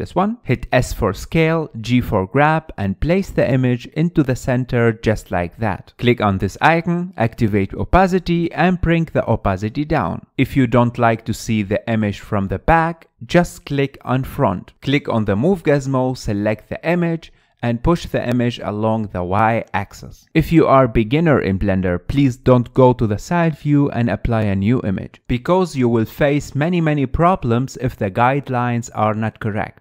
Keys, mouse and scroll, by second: 1.3 s, 1.7 g, 4.0 middle click, 4.8 middle click, 5.3 scroll down 2, 5.5 shift+middle click, 5.8 click, 7.4-9.8 drag, 9.8-12.9 middle drag, 14.8 click, 14.9-15.5 middle drag, 15.5-17.3 drag, 21.2-23.1 middle drag, 23.1 KP_3, 24.3 shift+a, 27.7-29.8 middle drag.